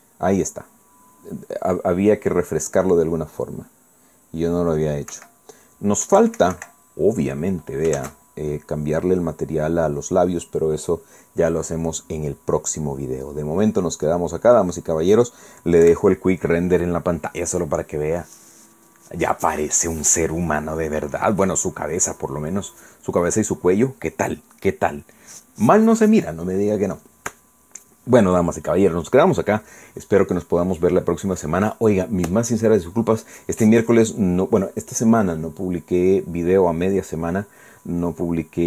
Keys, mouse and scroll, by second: 0.0 shift+z, 6.1 Escape, 7.2 Escape, 9.0 shift+z, 12.9-13.2 scroll down 2, 13.5-13.8 scroll up 2, 13.9 scroll down 2, 14.3-15.1 scroll up 4, 15.1 scroll down 2, 16.8 F12.